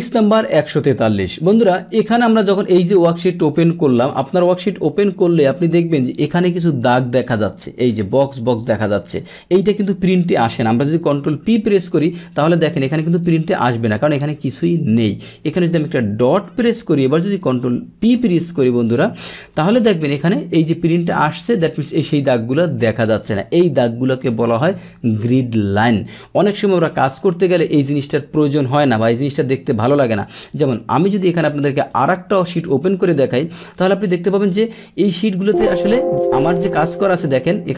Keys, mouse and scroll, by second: 1.6 click, 3.4-5.1 drag, 5.1 Delete, 6.2-7.2 drag, 7.8 click, 8.1 click, 8.5 click, 8.8 click, 9.1 click, 11.4 ctrl+p, 15.0 Escape, 15.4 click, 18.2 ctrl+p, 19.1 Return, 19.7 ctrl+p, 22.6 Escape, 23.5 click, 24.2 click, 24.8 Delete, 26.7 click, 27.9 click, 30.3 click, 31.0 click, 31.8 click, 31.9 click, 36.5 click.